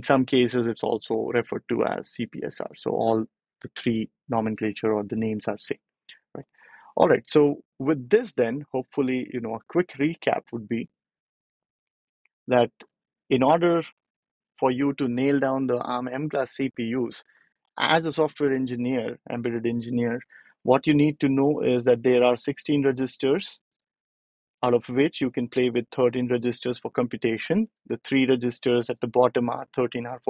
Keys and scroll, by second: 8.7 BackSpace, 9.7 ctrl+alt+super+p, 20.4 ctrl+alt+super+p.